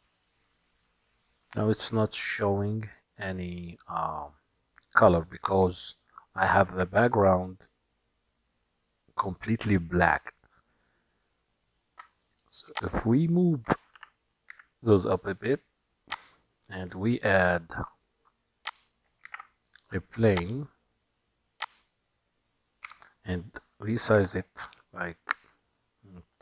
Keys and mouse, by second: 3.6-4.5 middle drag, 6.1-6.8 shift+middle drag, 12.8 shift+click, 14.0 g, 17.1-18.0 shift+middle drag, 19.3 shift+a, 22.9 s.